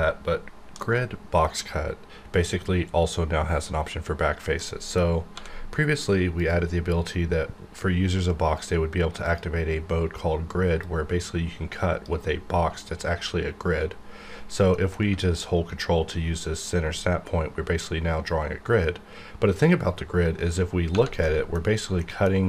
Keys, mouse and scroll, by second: 1.6-3.5 scroll up 1, 4.6 middle click, 5.3 d, 6.4 click, 9.2-14.7 drag, 15.1 middle click, 16.6-20.9 ctrl+drag, 21.2 middle click, 21.6-22.0 scroll up 1, 22.0 middle click.